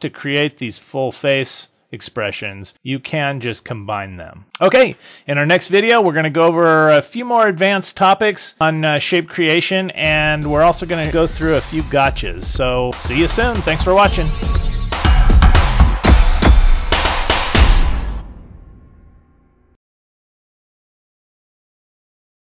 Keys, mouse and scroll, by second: 0.7 click.